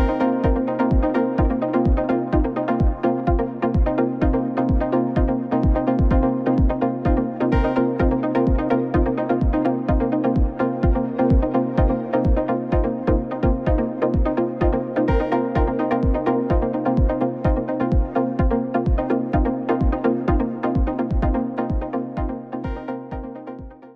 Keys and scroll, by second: 0.0-1.6 typing, 1.7 ctrl+a, 4.3 Down, 4.6 Up, 4.9 Down, 5.0 Up.